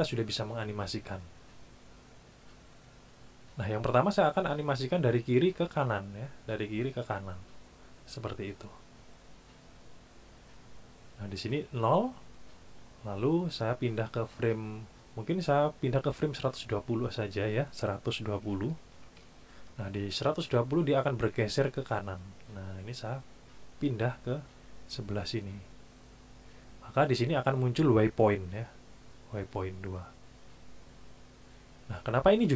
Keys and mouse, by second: 17.3 click, 18.4 KP_1, 18.7 KP_2, 18.9 KP_0, 19.2 KP_Enter, 23.6-26.0 drag.